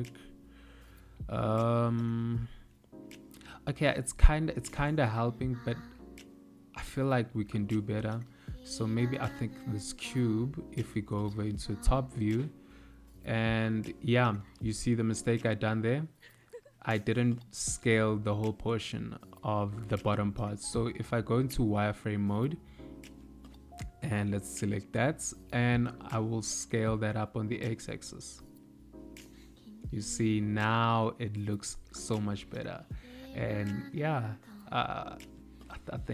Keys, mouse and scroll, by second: 7.7 click, 9.5 KP_7, 14.4 Tab, 15.8 a, 17.6 d, 18.7 middle click, 21.2 1, 21.7 z, 23.6 click, 25.0 middle click, 26.4 s, 32.2 Tab, 32.6 z, 34.2 middle click.